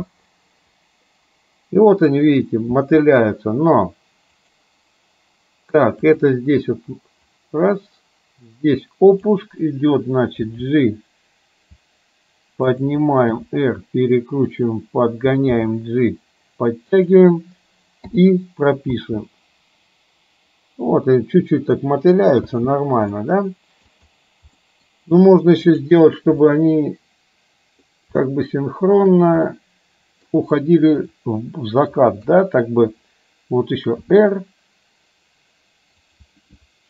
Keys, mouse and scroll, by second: 2.7 space, 4.5 click, 6.1 click, 7.4-9.4 drag, 10.6 g, 13.5 r, 15.6 g, 18.1 i, 19.1 space, 22.6 space, 23.2 middle click, 24.7 middle click, 25.7 click, 26.5-28.0 middle drag, 29.6 middle click, 31.2 middle click, 32.4 KP_3, 34.1 r.